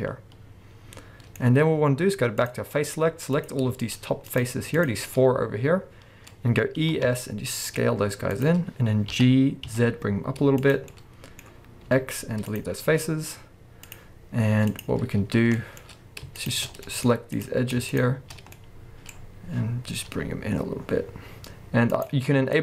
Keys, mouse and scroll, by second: 2.4 click, 2.7 middle click, 3.0-3.4 scroll up 1, 3.4 click, 3.8 shift+click, 5.0 scroll down 1, 5.1-6.3 middle drag, 6.3-6.8 scroll up 2, 8.5 click, 10.7 click, 10.9-11.9 middle drag, 13.9 click, 15.6 middle click, 15.8-16.3 scroll up 2, 16.3 shift+click, 16.9 middle click, 17.3 click, 17.9 middle click, 17.9 shift+click, 19.2-20.1 scroll down 2, 22.1 right click, 22.5 click.